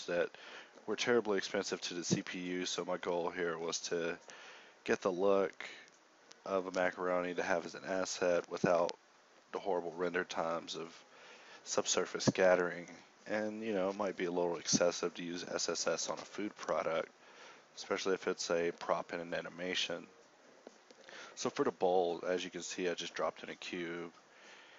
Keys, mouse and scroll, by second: 1.3 e, 2.0 Tab, 2.0 x, 3.2 Tab, 4.2 g, 5.4 z, 8.6 ctrl+Tab, 15.8 t, 21.0 a, 22.0 Tab, 22.0 ctrl+r, 23.1 s.